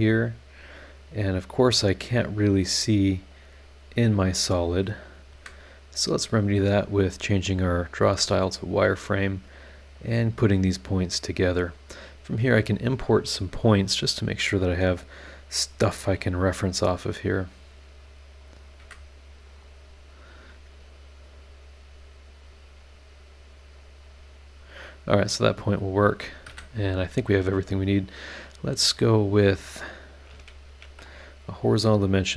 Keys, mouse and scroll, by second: 1.3 click, 2.4 click, 4.0 click, 5.0 click, 5.3 Escape, 6.6 click, 7.2 click, 8.1 Escape, 8.8 click, 9.9 click, 11.0 click, 12.1 click, 13.0 click, 15.7 click, 18.4 click, 18.8 Escape, 19.4 click, 21.2 click, 22.4 click, 23.7 click, 26.4 Escape, 30.6 shift+h, 31.7 click.